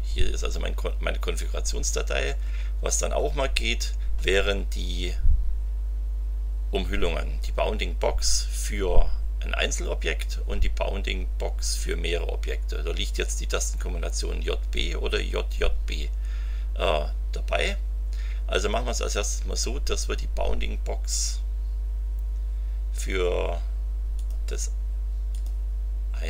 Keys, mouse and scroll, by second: 0.2-1.0 scroll down 2, 1.8-2.5 scroll up 2, 3.3-4.2 scroll down 3, 24.1 click, 25.3 click.